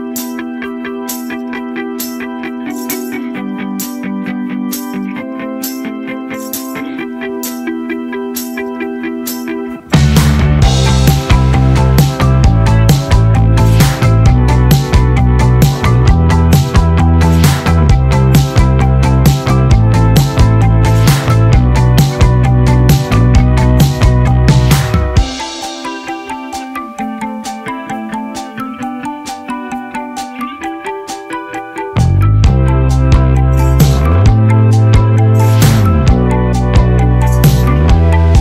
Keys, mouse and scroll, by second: 1.0-1.5 scroll down 1, 1.5 middle click, 2.8 click, 7.9 right click, 8.6 click, 12.0 Return, 12.3-13.8 typing, 14.8 click, 15.6 shift+click, 28.8-30.5 drag, 33.7 click, 37.5 click.